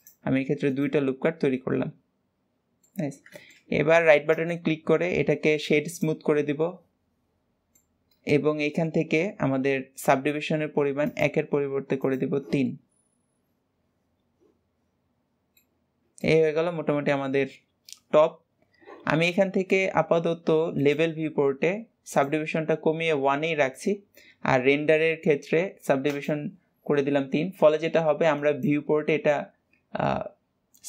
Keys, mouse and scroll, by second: 1.1 Tab, 1.3-1.6 scroll down 2, 1.6-3.1 middle drag, 3.1-3.4 scroll down 2, 3.4-3.9 shift+middle drag, 3.9-4.4 scroll up 1, 4.4-6.4 right drag, 6.4-11.1 middle drag, 11.1-12.7 drag, 12.7-15.8 middle drag, 15.9-16.3 scroll up 1, 16.3-19.3 middle drag, 20.9 click, 23.4-26.1 middle drag, 26.1-30.8 drag.